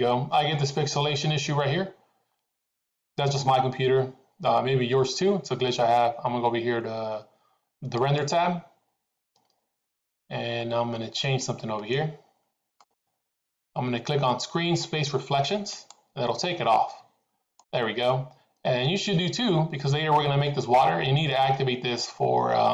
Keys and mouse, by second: 17.6 middle click.